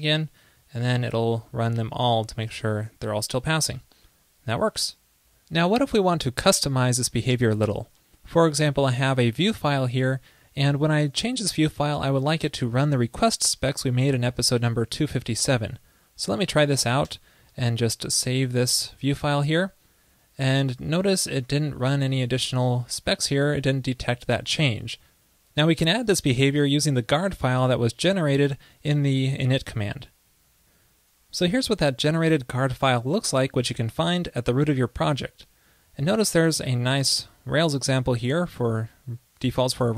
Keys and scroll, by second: 20.8 super+s.